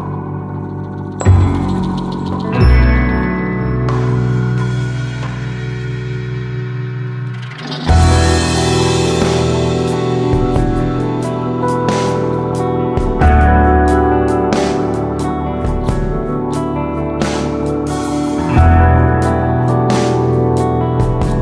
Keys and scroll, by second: 0.5 super+d, 5.7 super+d, 8.4 super+d, 8.6 super+d, 8.7 super+d.